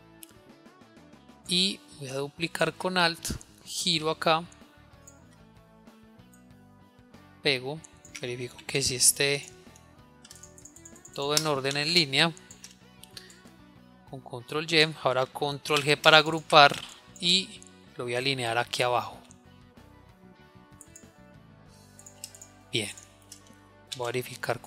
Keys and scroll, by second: 9.1 ctrl+y, 13.1 ctrl+y, 16.4 ctrl+g.